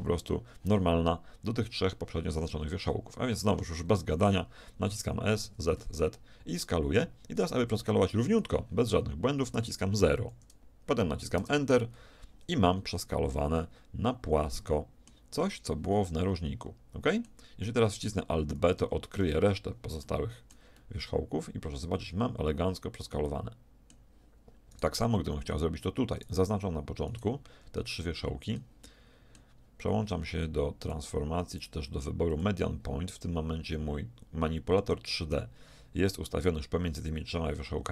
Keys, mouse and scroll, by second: 5.0 s, 13.0 z, 13.6 middle click, 14.6 middle click, 14.8 middle click, 15.2-17.8 middle drag, 17.9 middle click, 18.8 alt+b, 19.8-21.2 middle drag, 21.3 middle click, 24.7-26.6 right drag, 28.0-30.4 middle drag, 30.8-32.6 drag.